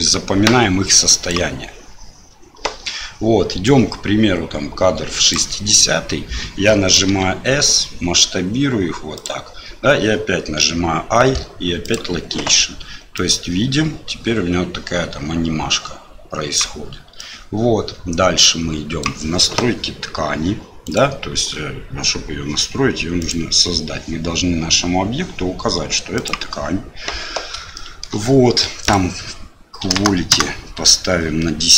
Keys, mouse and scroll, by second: 3.6-5.3 drag, 7.1 s, 10.6 i, 13.1-16.5 drag, 17.1-19.0 drag, 20.8 click, 23.2-26.3 drag, 27.7 shift+middle click, 28.9-31.7 drag.